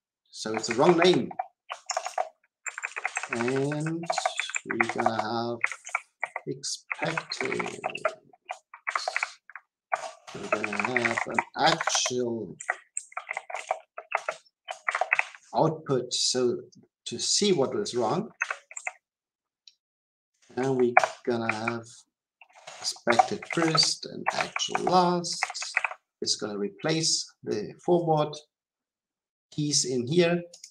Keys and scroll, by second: 1.0 Delete, 1.8 shift+Return, 20.9 Return, 21.5 Return, 25.7 Return.